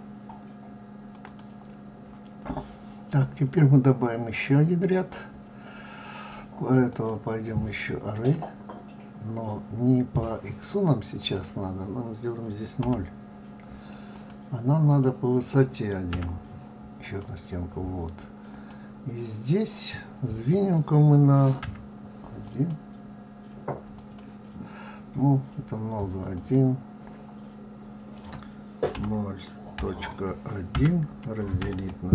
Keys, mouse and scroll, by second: 6.8 click, 11.1 click, 14.8 click, 18.4 click, 26.3 click.